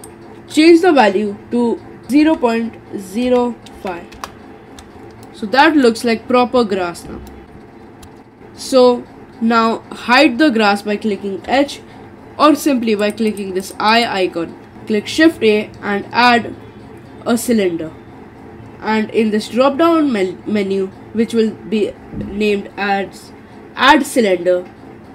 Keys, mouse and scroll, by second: 5.2-6.6 middle drag, 6.6-7.3 scroll up 3, 7.3 middle click, 7.9 scroll down 3, 8.0-10.0 middle drag, 11.4 h, 13.0 click, 13.3 click, 13.6 click, 13.9 click, 15.1 shift+a.